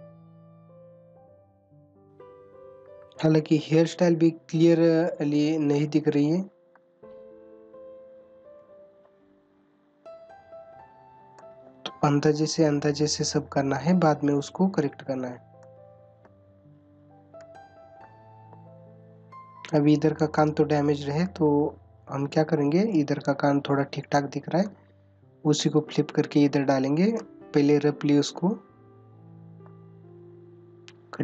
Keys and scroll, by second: 1.4 space, 2.8 ctrl+alt+z, 11.4 space, 15.6 space.